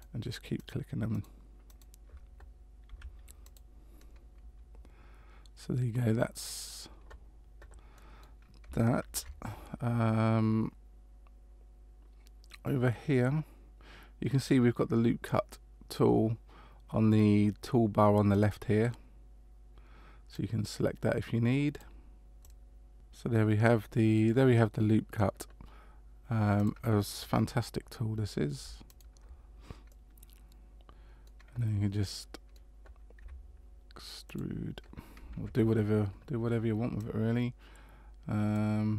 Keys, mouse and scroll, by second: 2.8 s, 4.0 middle click, 7.9 middle click, 9.0 ctrl+r, 18.3 click, 20.3 click, 22.4 click, 22.9 middle click, 26.6 click, 28.9 alt+right click, 29.9 middle click, 32.0 middle click, 33.2 e, 35.4 ctrl+z, 37.0 click.